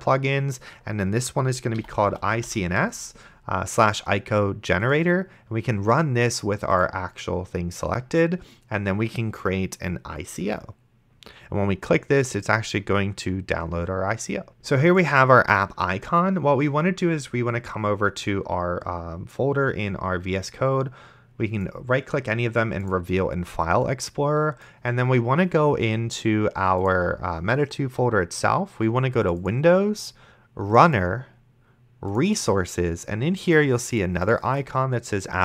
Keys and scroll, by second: 1.8-3.0 typing, 14.6 Return.